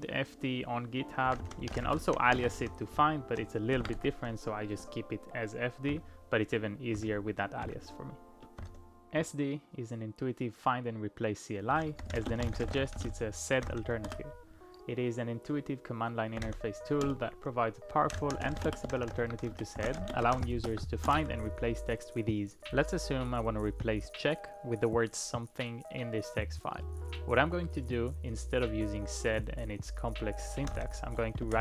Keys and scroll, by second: 1.0-4.0 typing, 3.8 ctrl+a, 5.9 ctrl+d, 7.0 ctrl+d, 7.6 ctrl+d, 11.7-14.1 typing, 16.1-21.0 typing, 21.1 Return, 30.4-31.6 typing.